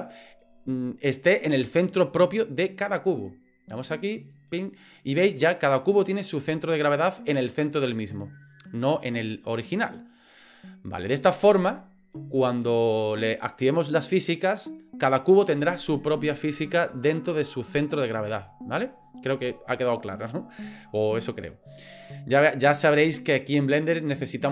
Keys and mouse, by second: 5.0-8.7 middle drag, 10.4-24.5 drag.